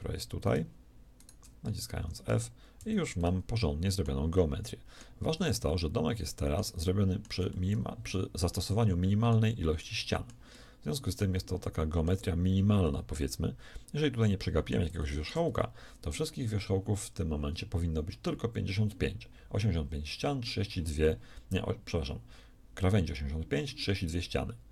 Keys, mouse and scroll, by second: 1.9 f, 2.1 a, 2.6 z, 15.2 shift+a.